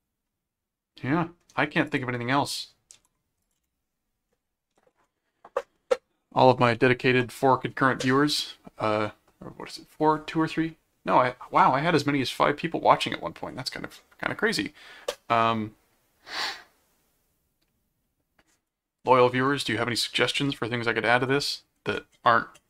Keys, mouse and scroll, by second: 1.8 click, 2.9 ctrl+s, 3.4 click, 3.6 space, 4.7 ctrl+7.